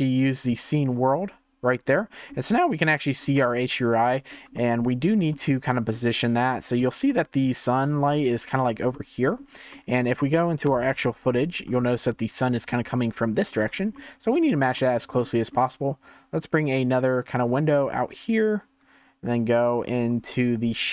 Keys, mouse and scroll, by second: 1.8 middle click, 2.8-10.7 shift+middle drag, 10.7 KP_0, 11.6-13.5 scroll up 2, 13.5-13.9 scroll down 4, 13.9-14.4 middle drag, 14.4-14.7 scroll down 1, 14.7-16.6 shift+middle drag, 16.6 click, 18.2 click.